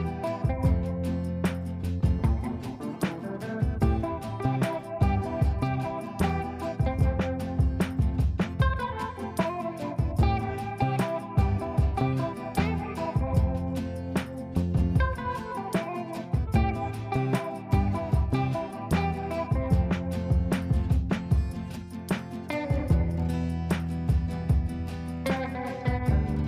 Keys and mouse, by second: 13.5 F2, 13.9-14.6 drag, 21.6-23.8 drag.